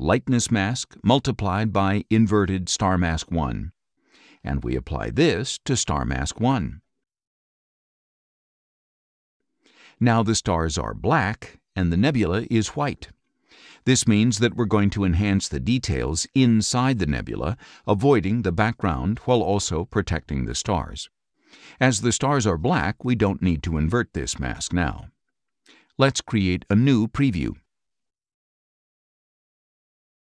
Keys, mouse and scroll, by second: 0.0-1.2 typing, 2.6-4.0 typing, 7.3 click, 22.5 click, 23.5 click, 25.9-27.8 drag, 28.5 click, 29.6 click.